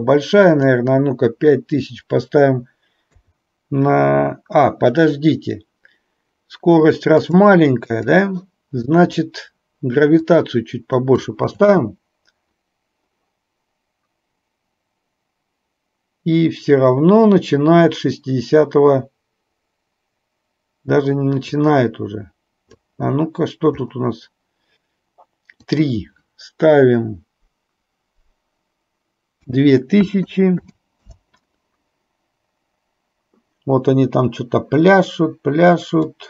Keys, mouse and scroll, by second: 0.5-7.4 drag, 8.0 click, 10.4 click, 11.8 space, 21.8-22.9 drag, 25.8-31.4 drag, 30.4 KP_0, 36.1-36.2 drag.